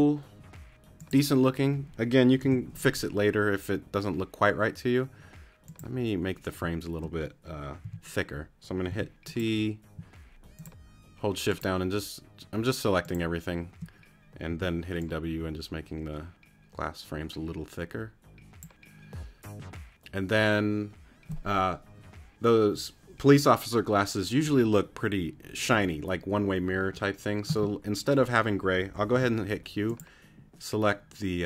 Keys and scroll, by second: 2.4 t, 7.8 shift+t, 14.5 shift+w, 29.1 q.